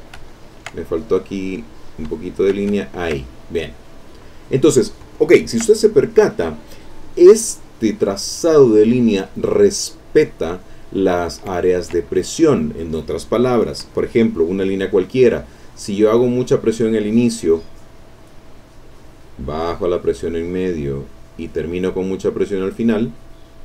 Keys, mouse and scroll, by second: 0.3 ctrl+shift+middle click, 0.3 ctrl+click, 1.8 shift+click, 2.8 ctrl+shift+middle click, 3.0 ctrl+click, 3.3 ctrl+click, 3.9 ctrl+click, 4.6 middle click, 4.9 ctrl+click, 5.8 ctrl+click, 7.5 click, 11.3 ctrl+click, 12.1 ctrl+click, 16.5-22.6 drag.